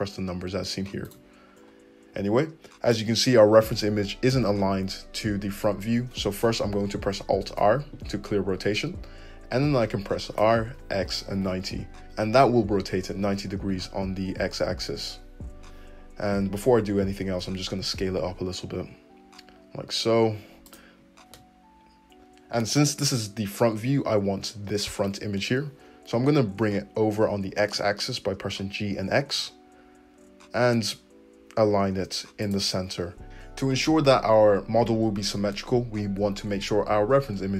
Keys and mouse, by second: 7.6 alt+r, 10.4 r, 17.3 s, 26.6 g.